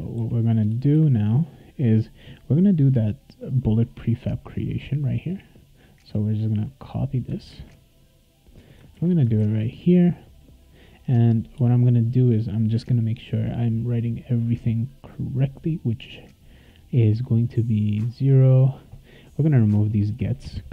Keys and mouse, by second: 0.7 Return, 0.9 Return, 5.8-7.3 drag, 7.5 ctrl+c, 8.7 click, 8.9 ctrl+v, 9.4 ctrl+s, 11.4 click, 11.5 Return, 18.2 click, 19.1 click, 20.4 BackSpace.